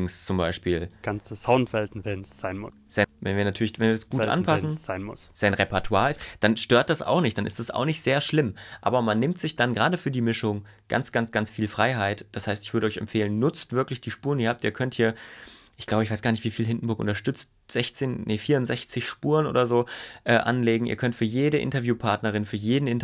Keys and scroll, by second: 0.9 space, 3.0 space, 6.2 space, 7.1 super+y.